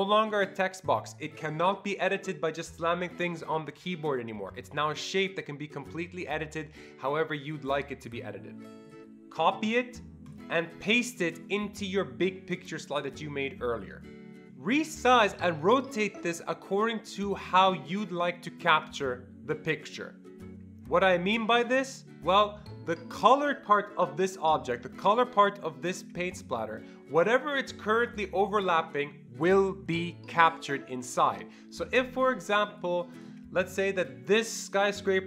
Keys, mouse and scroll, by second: 8.9 click, 9.6 ctrl+c, 10.3 click, 10.8 ctrl+v, 14.2 click, 14.7-20.2 shift+drag, 32.8-35.2 shift+drag.